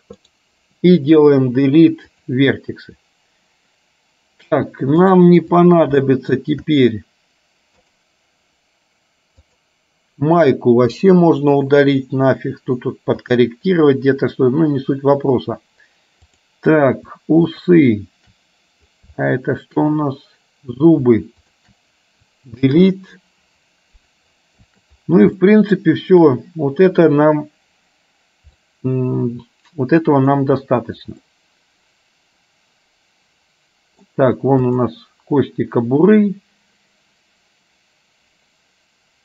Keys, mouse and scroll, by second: 1.4 Delete, 5.2 click, 6.1 shift+middle click, 9.6 click, 10.9 Delete, 13.3 click, 16.4 click, 17.7 shift+click, 19.3 shift+middle click, 21.4 shift+click, 25.6 shift+middle click, 28.7-30.4 middle drag, 31.4-34.2 middle drag, 34.7 click.